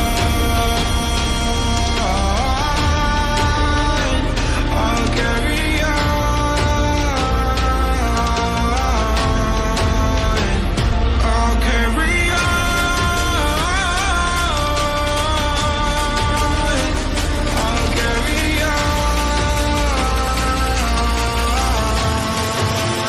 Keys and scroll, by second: 5.6 ctrl+g, 7.4 ctrl+g.